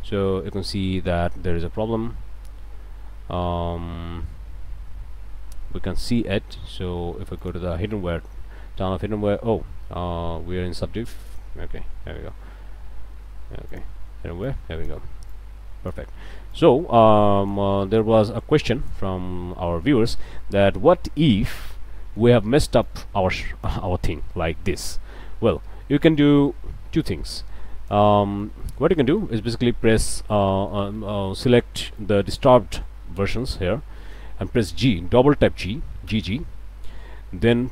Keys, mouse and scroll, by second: 0.0 click, 0.9 shift+click, 1.5 shift+a, 5.5 scroll down 2, 6.3 q, 7.4 click, 8.2 click, 11.3 click, 11.8 click, 12.3 scroll up 1, 13.3 q, 13.7 click, 14.5 click, 15.3 click, 16.5-17.7 drag, 18.0-19.1 drag, 19.2 scroll down 1, 19.5 click, 20.1 scroll down 1, 20.4 click, 20.9 click, 21.8 click, 22.8-23.9 drag, 23.9 middle click, 24.9 middle click, 26.3 middle click, 27.0-28.1 drag, 28.5 shift+click, 29.6 shift+click, 30.3 click, 31.0 click, 32.0-33.3 ctrl+right drag, 36.1 g.